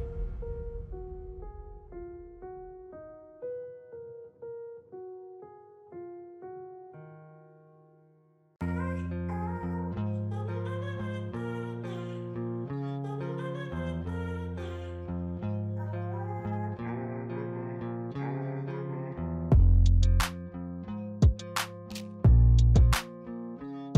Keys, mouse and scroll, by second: 4.4-7.5 drag, 9.7 click, 12.3-15.4 drag.